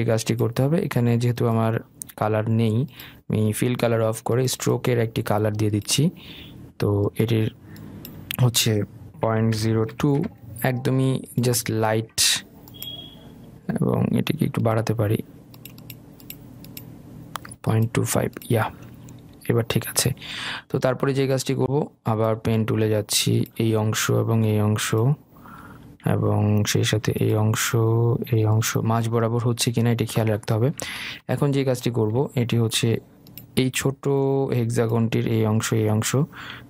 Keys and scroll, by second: 10.6 Return, 26.3 Escape.